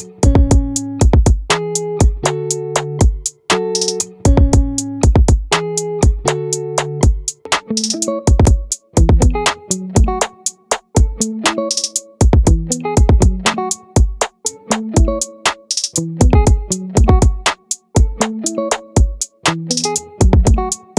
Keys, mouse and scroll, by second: 6.9-9.3 right drag, 9.3 middle click, 9.6 right click, 9.9 right click, 13.0 middle click, 18.3-20.3 middle drag, 20.3 right click, 20.4-20.9 middle drag.